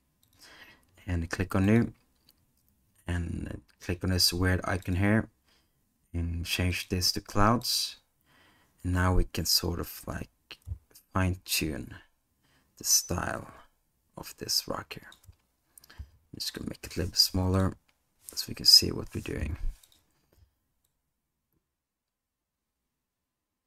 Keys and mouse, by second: 6.9-7.7 drag, 11.2-15.2 drag, 16.0 s, 17.2 g, 19.4 g, 21.0-23.6 drag.